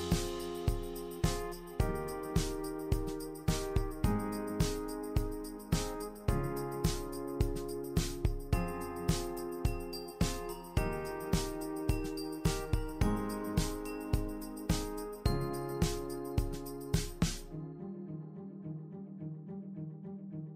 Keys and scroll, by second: 6.8-7.4 typing, 17.7-19.0 typing.